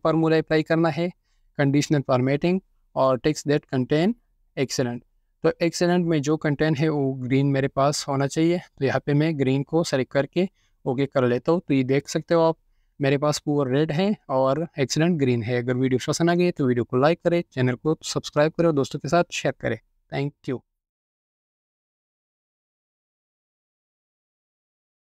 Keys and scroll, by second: 5.9-8.7 typing, 14.5-15.3 typing.